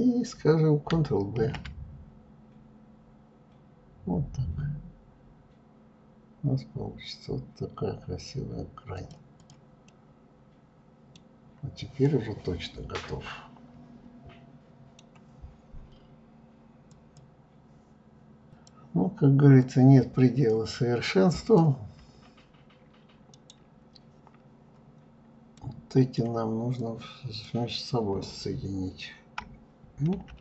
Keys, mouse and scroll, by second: 0.2 ctrl+b, 8.2 click, 8.7-10.2 middle drag, 10.2 scroll down 2, 10.9-13.9 middle drag, 18.6 click, 22.4-24.1 right drag, 24.1-24.5 scroll up 1, 24.6-25.8 middle drag, 25.8-28.8 drag.